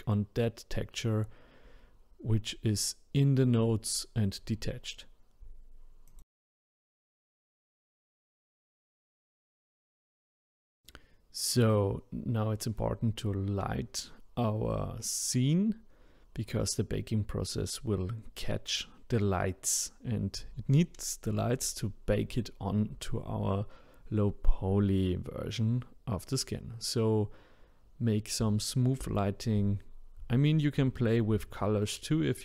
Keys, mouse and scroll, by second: 0.0 click, 5.1 click, 6.2 click, 7.1-8.5 drag, 8.7 scroll up 2, 8.7 scroll down 2, 8.8 middle click, 9.2 click, 10.2-11.0 scroll down 1, 11.0 click, 11.3 shift+d, 11.6 click, 12.6 middle click, 12.9 scroll down 2, 13.0 middle click, 13.3 click, 13.4-14.3 scroll up 2, 14.3 shift+click, 14.7 shift+d, 16.1 click, 16.7 middle click, 16.9-17.3 scroll down 1, 17.3 click, 18.6 KP_0, 18.9 middle click, 19.8 KP_0, 20.2 click, 21.1 KP_0, 21.3 click, 22.0 KP_0, 22.1-22.9 middle drag, 22.9 click, 23.5 KP_0, 23.9 click, 24.5 KP_0, 24.8-25.2 middle drag, 25.2 scroll up 1, 25.3 scroll down 2, 25.5-26.1 middle drag, 26.1 scroll down 1, 26.2-27.2 middle drag, 27.2-27.6 scroll down 1, 27.6 click, 27.8-28.2 scroll up 1, 28.2 shift+d, 32.0 middle click.